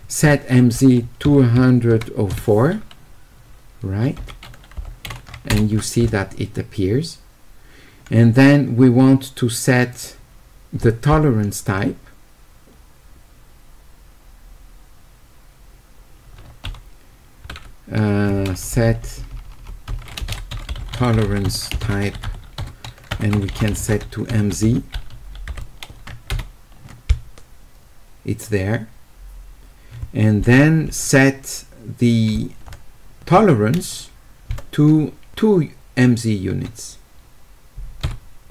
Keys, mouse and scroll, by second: 9.9 click, 20.5-22.3 typing, 23.8 w.